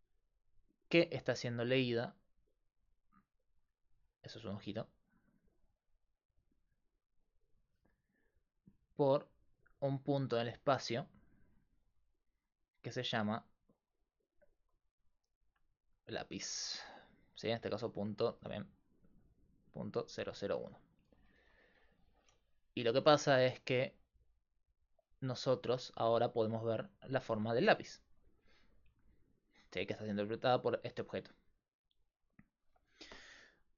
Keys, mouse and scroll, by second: 0.0-32.7 typing, 3.0-6.2 drag, 18.8-23.7 drag, 26.8-28.6 drag.